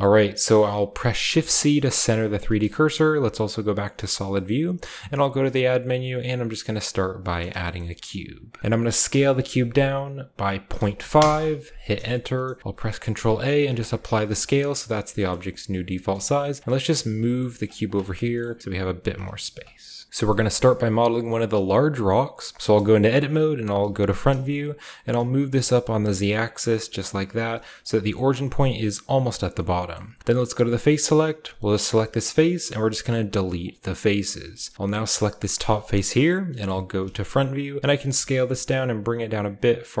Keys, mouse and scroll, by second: 0.2-1.2 scroll down 2, 1.2-2.0 scroll down 1, 1.3 typing, 2.0-4.0 scroll up 2, 2.6-6.2 shift+middle drag, 3.1-3.8 typing, 4.4-6.2 scroll up 1, 5.0-5.6 typing, 7.0-8.6 drag, 7.4-8.6 shift+middle drag, 7.4-8.6 scroll down 1, 9.0 s, 10.7-11.1 typing, 11.1 Return, 12.2-13.6 shift+middle drag, 12.2-13.6 shift+scroll up 1, 12.6 ctrl+a, 13.6-15.8 drag, 13.6-14.2 scroll up 1, 14.8-15.7 shift+scroll up 1, 15.7 shift+middle click, 16.0 g, 16.6-19.0 drag, 17.0-19.7 scroll up 1, 17.4 g, 19.0 ., 19.7-21.9 scroll down 2, 20.0 middle drag, 20.1 Tab, 20.1 space, 20.6-21.9 shift+middle drag, 22.5 Tab, 23.6 KP_1, 24.3-25.0 scroll up 1, 25.0-27.5 scroll up 1, 25.0 g, 25.3 z, 27.7-29.3 shift+drag, 28.1-29.3 shift+scroll up 1, 29.3 scroll up 1, 29.4-30.7 scroll down 1, 29.5-30.7 middle drag, 30.7 click, 31.3 right click, 31.8 x, 33.5 click, 33.9-36.5 middle drag, 36.5 KP_1, 37.3-40.0 shift+scroll up 1, 37.7 s, 37.9 shift+click, 37.9 g, 38.2 z.